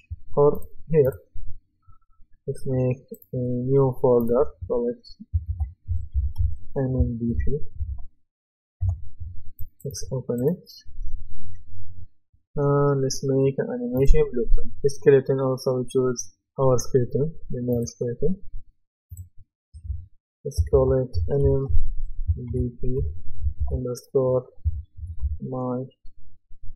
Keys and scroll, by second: 5.5-7.9 typing, 8.8 Return, 20.7-23.0 typing, 24.8-25.7 typing.